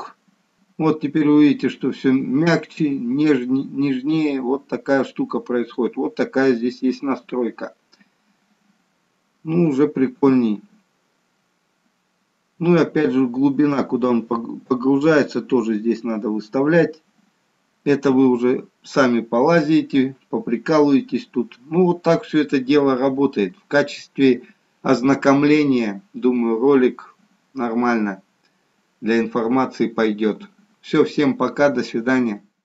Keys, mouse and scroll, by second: 0.5 space, 5.5-8.6 scroll down 1, 10.3 KP_1.